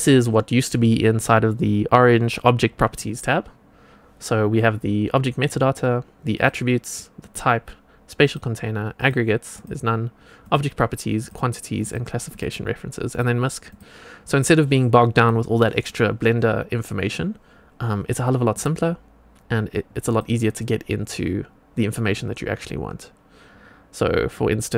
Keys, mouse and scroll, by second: 6.3 click, 7.1 click, 8.1 click, 8.9 click, 9.5 click, 10.4 click, 11.1 click, 11.7 click, 12.2 click, 13.0 click, 13.6 click, 15.1 click, 18.4 click, 20.0 click.